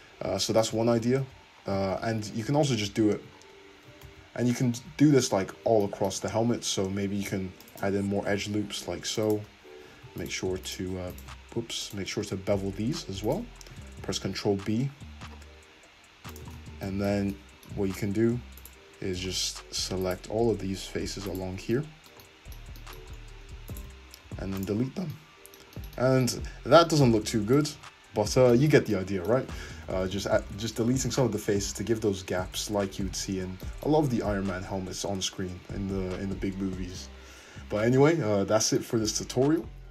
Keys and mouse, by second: 0.8 ctrl+z, 1.2 ctrl+z, 2.1 ctrl+z, 2.5 ctrl+z, 2.7 ctrl+z, 2.9 ctrl+z, 4.4 ctrl+z, 4.8 `, 5.5 `, 7.2 ctrl+r, 8.4 ctrl+r, 10.2 alt+shift+click, 10.7 alt+shift+click, 11.2 alt+shift+click, 11.9 alt+click, 12.4-16.8 alt+shift+drag, 14.1 ctrl+b, 16.8-18.6 shift+middle drag, 17.9 3, 18.6 click, 19.3 ctrl+middle click, 20.1 ctrl+click, 20.8 ctrl+middle click, 21.4 ctrl+click, 21.4-22.8 middle drag, 23.8 ctrl+click, 24.2 x, 25.0 Tab, 26.4 `, 27.8 `, 29.5 ctrl+z, 29.7 ctrl+z, 30.1 ctrl+z, 30.2 ctrl+z, 30.4 ctrl+z, 30.6 ctrl+z, 30.8 ctrl+z, 30.9 ctrl+z, 31.5 ctrl+z, 32.0 ctrl+z, 32.4 ctrl+z, 32.7 ctrl+z, 32.9 ctrl+z, 33.2 ctrl+z, 34.0 `, 34.7 `, 35.5 Tab, 35.5-39.9 middle drag.